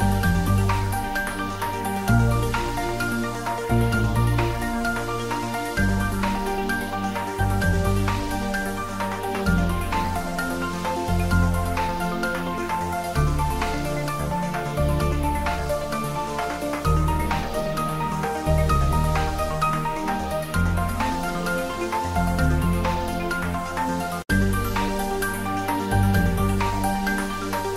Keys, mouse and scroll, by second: 0.2 Tab, 0.4 middle click, 1.2 ctrl+r, 1.7 click, 4.1 click, 4.3 Tab, 5.3 r, 5.7 click, 7.3 click, 7.8 Tab, 8.6 ctrl+s, 9.8 ctrl+s, 9.9 click, 10.3-10.7 middle click, 11.5 click, 12.4 s, 13.5 click, 15.0 click, 15.4 ctrl+middle drag, 17.0 click, 17.7 x, 18.4 ctrl+s, 19.2-19.6 ctrl+middle click, 19.9-20.2 middle click, 20.6 click, 21.4 Return, 22.3 ctrl+s, 22.6-22.9 middle drag, 24.9 click, 25.2 ctrl+s, 26.0 click, 27.2 click.